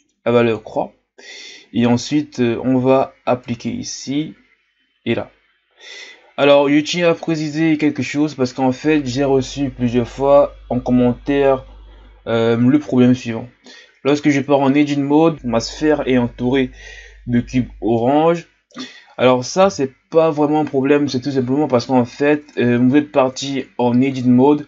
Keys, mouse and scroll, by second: 7.2-8.1 scroll down 5, 8.1-11.3 ctrl+scroll up 4, 13.5-14.3 ctrl+scroll down 1, 14.3 Tab, 15.3 middle click, 17.9-19.6 middle drag, 19.6 KP_1, 22.4 Tab, 23.3 Tab.